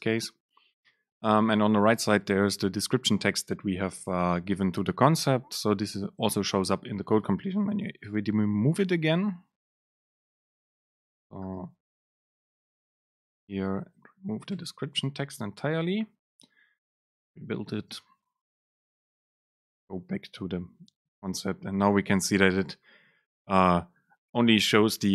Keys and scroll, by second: 9.3 ctrl+shift+super+F12, 12.2 Up, 13.1 Up, 13.2 Down, 13.4 End, 14.0 ctrl+shift+super+Left, 14.6 BackSpace, 17.3 ctrl+shift+super+F9, 21.2 super+space.